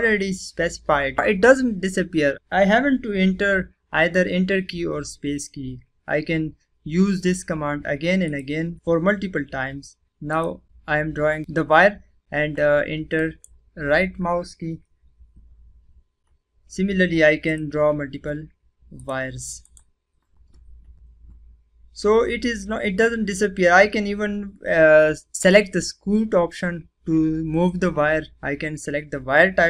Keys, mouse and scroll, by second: 8.2 click, 8.2 typing, 10.2 click, 10.3 click, 11.8 typing, 13.1 right click, 13.1 typing, 17.4 click, 19.6 right click.